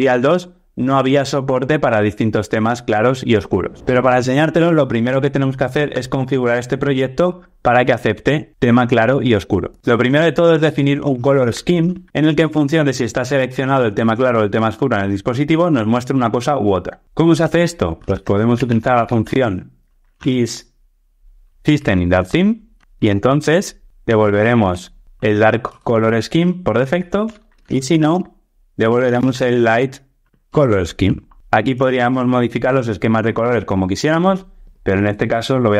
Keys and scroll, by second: 21.8 Return, 25.7 Return, 30.5 Return.